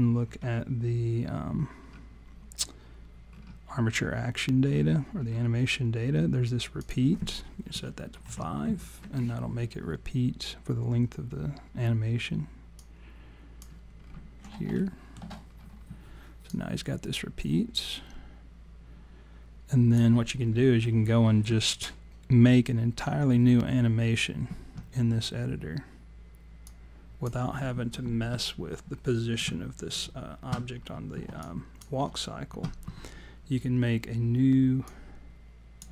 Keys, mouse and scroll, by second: 1.6-2.1 scroll down 3, 3.3-3.6 scroll up 1, 4.6 scroll down 1, 4.7-5.4 scroll down 6, 6.4-6.7 scroll down 1, 6.8 click, 12.8 click, 14.0-14.5 scroll down 4, 14.8 alt+middle click, 15.5 scroll down 3, 16.5 click, 26.6 click, 30.8-31.1 scroll down 1, 31.4 alt+click, 31.4-32.0 scroll down 1, 34.9 click.